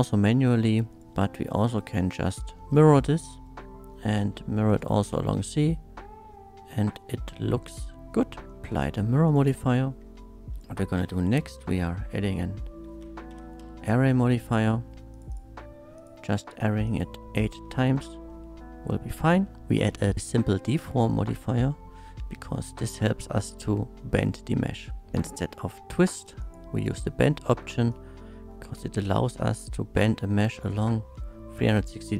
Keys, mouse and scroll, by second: 0.9 shift+click, 1.0 m, 1.6 click, 2.6 shift+middle drag, 4.7 shift+click, 5.3-8.3 shift+middle drag, 8.7 click, 9.3 click, 9.6-10.0 scroll down 1, 10.5 click, 11.0-13.7 typing, 14.3 click, 15.1 click, 15.3 click, 16.0 click, 16.3 click, 16.8 click, 17.3 click, 17.8 shift+middle click, 18.3-19.1 shift+middle drag, 19.4 shift+middle drag, 19.6 e, 19.9 f, 20.7 click, 21.4-24.1 middle drag, 26.4 click, 27.9-30.6 drag, 31.0-32.1 middle drag.